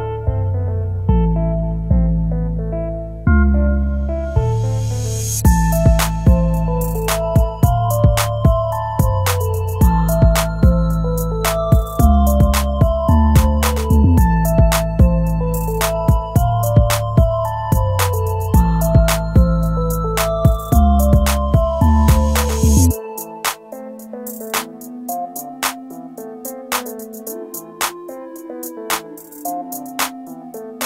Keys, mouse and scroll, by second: 3.8 scroll down 1, 15.7-17.5 scroll up 1, 17.5 right click, 20.5 shift+F11.